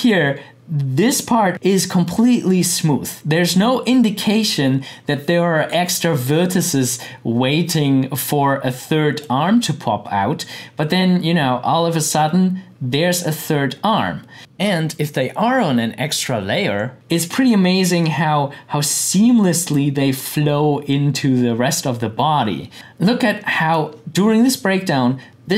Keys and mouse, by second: 9.2 click, 23.4 click.